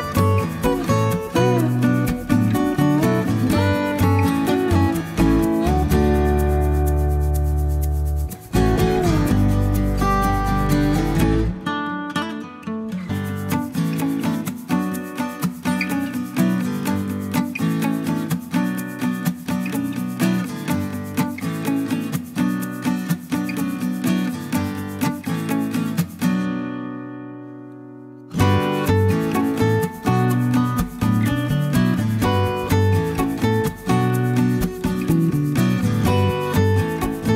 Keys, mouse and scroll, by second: 0.8 click, 2.0 2, 2.3 0, 4.1 click, 8.9-13.0 drag, 13.5 1, 15.0 scroll down 1, 15.9 click, 18.6-19.3 drag, 19.6 1, 20.2 click, 20.7-22.2 middle drag, 22.7-24.1 drag, 24.6 click, 25.2-26.6 middle drag, 27.0 0, 27.9 middle click, 30.8 click, 32.4 click, 33.5 click, 35.2 click, 36.0 ctrl+click.